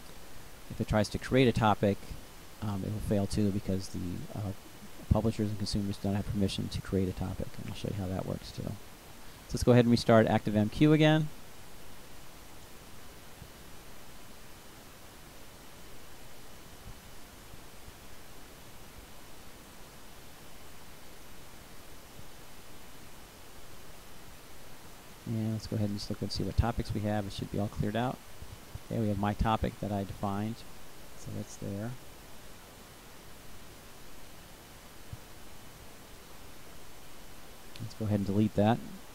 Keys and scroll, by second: 9.0 Return.